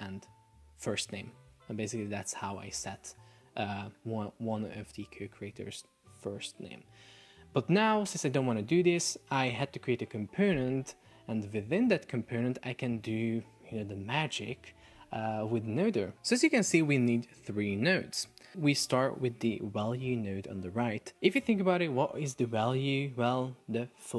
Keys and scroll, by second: 5.0 super+z.